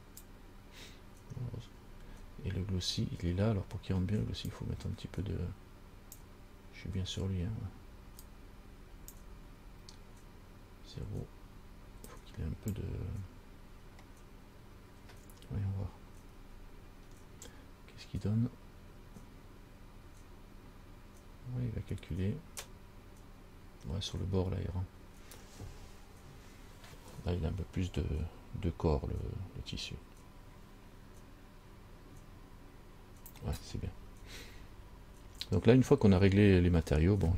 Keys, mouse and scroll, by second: 4.7 click, 8.5 click, 12.3 click, 15.1 scroll up 1, 16.7 scroll up 2, 17.3 scroll up 2, 33.8-34.1 scroll down 5, 35.0 scroll down 1.